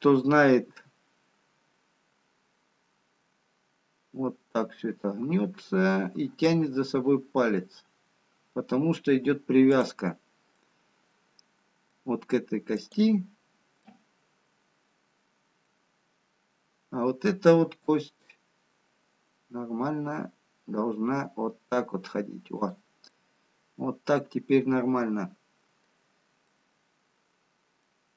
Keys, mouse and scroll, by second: 1.9 r, 10.6 middle click, 13.3 click, 14.1 middle click, 18.9 r, 23.1 middle click.